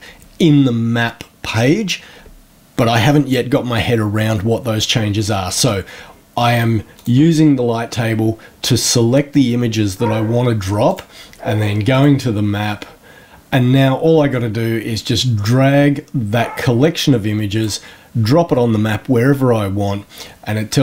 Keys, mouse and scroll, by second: 6.9 click, 10.8 click, 11.9 click, 14.2-17.7 drag.